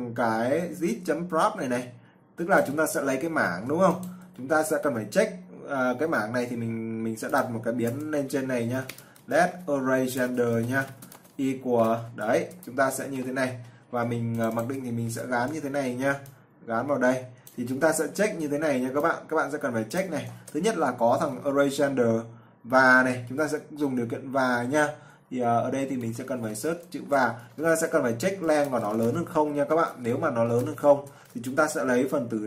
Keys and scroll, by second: 3.7 ctrl+c, 4.7 ctrl+v, 13.0 ctrl+v, 15.5 ctrl+c, 18.2 ctrl+v, 24.3-25.7 typing, 27.3 ctrl+v.